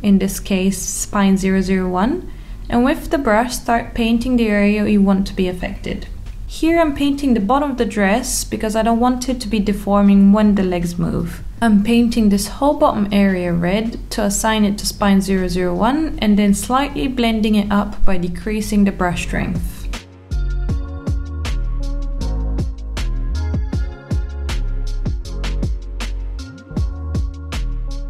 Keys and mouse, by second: 3.2 click, 4.1-6.1 middle drag, 8.3 click, 9.4-10.9 drag, 11.1 click, 11.6 click, 12.1 click, 12.7 alt+middle click, 13.5 click, 14.3 click, 15.2 alt+middle click, 16.2 alt+middle click, 16.7 click, 17.5 click, 18.0 click, 18.3 click, 18.6 click, 18.9 alt+middle click, 19.6 alt+middle click, 20.2 click, 21.1 alt+middle click, 21.6 click, 22.3 alt+middle click, 23.0 alt+middle click, 25.3 click, 26.9 click, 27.8 click.